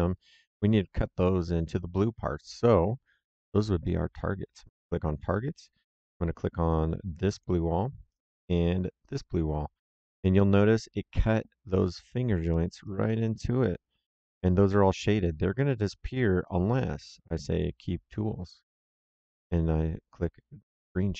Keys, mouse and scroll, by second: 4.5 click, 7.3 click, 8.9 click, 10.0 middle click, 12.4 middle click, 12.7 right click, 15.5 middle click, 17.4 click, 20.7 click.